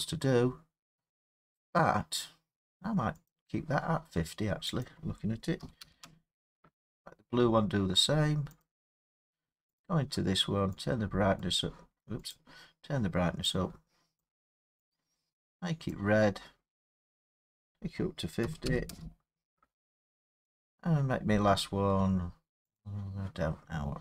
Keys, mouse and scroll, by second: 1.3 middle click, 1.4 middle click, 3.3 click, 5.1 click, 5.7 typing, 6.0 Return, 8.6 click, 9.8 click, 11.4 click, 12.3 click, 14.2 click, 15.9 click, 18.4 typing, 18.9 Return, 20.8 click, 22.8 click.